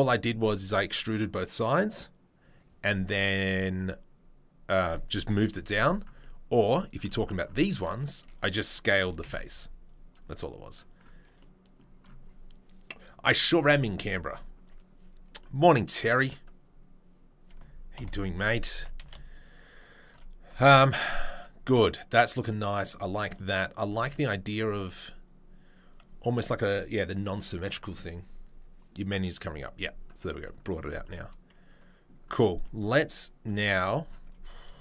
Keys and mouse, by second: 16.1 click, 16.1-34.8 middle drag, 18.7 s, 20.6 Tab, 23.9 Tab, 33.4 Tab, 34.0 click.